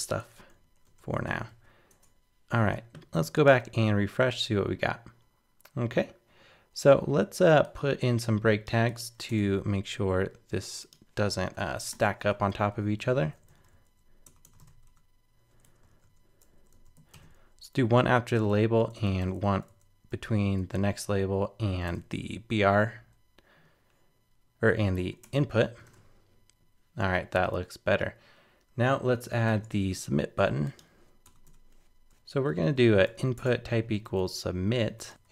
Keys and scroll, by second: 1.5 super+s, 1.9 super+Tab, 3.5 super+r, 9.3 super+Tab, 13.5 super+c, 14.6 super+v, 15.9 super+BackSpace, 17.0 super+Right, 17.1 super+v, 20.4 super+Right, 21.9 super+v, 25.0 super+s, 25.2 super+Tab, 25.9 super+r, 29.5 super+Tab.